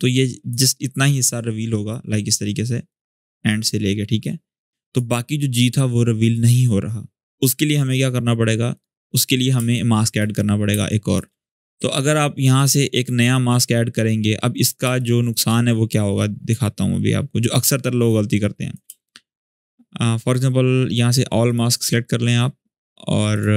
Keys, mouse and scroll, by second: 9.3-11.5 typing, 9.5 click, 10.1-10.4 scroll up 1, 10.6 click, 12.3-14.6 drag, 14.6 space, 14.7-15.3 click, 15.1 space, 15.7-16.3 drag, 18.6 space, 18.8 click, 19.1 space, 21.2 click.